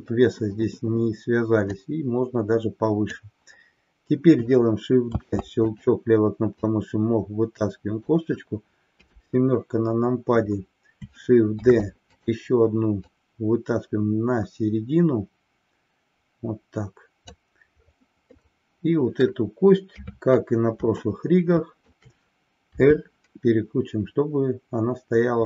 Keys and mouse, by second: 1.8-3.3 drag, 5.2 shift+d, 6.7-8.2 drag, 8.9 KP_7, 11.5 shift+d, 13.1-17.4 drag, 18.4-19.4 middle drag, 20.2 KP_3, 21.2 shift+middle click, 22.8 r.